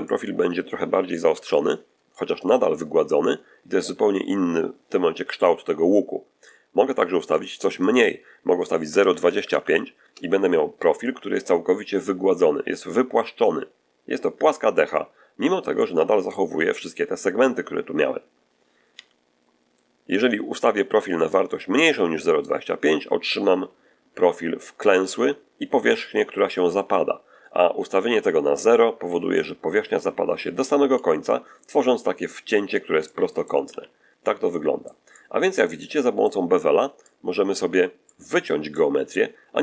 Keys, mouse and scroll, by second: 0.9 7, 2.3 click, 7.2 click, 7.7 click, 8.9 BackSpace, 9.0 BackSpace, 9.9 Return, 9.9 2, 9.9 5, 15.6 middle click, 18.8 3, 21.2-31.0 drag, 32.9 middle click, 33.6 z, 34.1 middle click, 35.0 middle click, 36.9-37.6 drag, 37.9 middle click, 38.6 middle click.